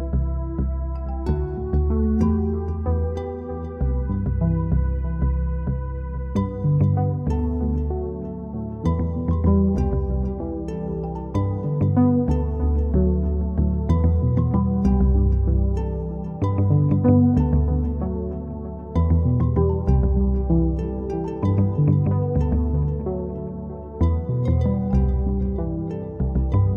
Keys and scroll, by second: 2.4-3.1 typing, 4.4-5.1 typing, 5.5 Home, 10.7-11.4 typing, 16.9 ctrl+z, 17.8 Home, 19.3 Home, 26.7 typing.